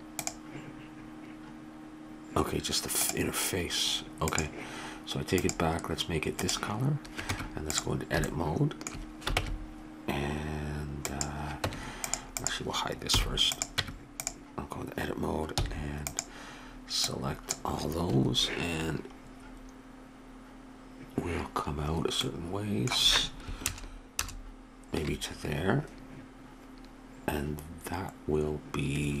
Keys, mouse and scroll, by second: 4.3-7.0 drag, 7.2 Tab, 9.4 ctrl+Tab, 11.7 Tab, 12.4 click, 13.1 h, 13.8 Tab, 15.6 c, 23.7 ctrl+KP_Add.